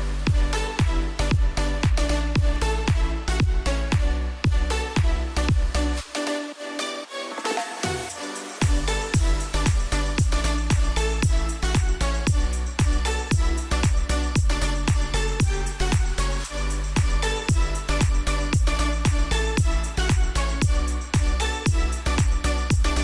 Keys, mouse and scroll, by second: 7.0-8.3 scroll down 1, 9.1 click, 10.2 Return, 11.1 click, 11.6-12.1 scroll down 1, 13.2-17.5 drag, 17.5 ctrl+z, 18.4-23.0 drag.